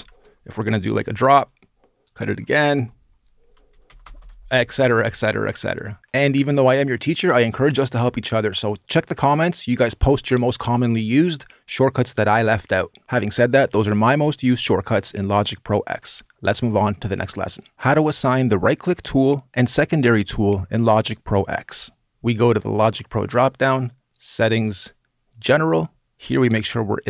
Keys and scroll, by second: 0.6 super+r, 1.9 super+r, 2.5 Return, 3.3 super+r, 3.5 super+r.